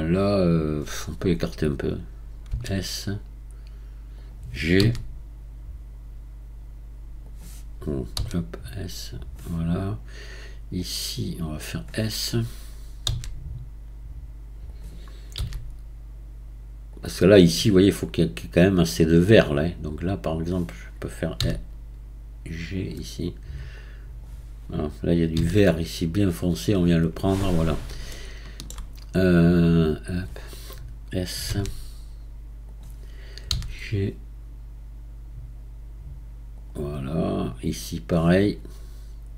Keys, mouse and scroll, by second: 2.5 s, 4.8 g, 8.2 s, 10.8 drag, 13.1 s, 15.4 g, 19.9 click, 21.4 g, 23.8 drag, 25.4 g, 28.1-29.5 shift+middle drag, 29.5 click, 31.5 s, 33.5 g, 37.4 drag.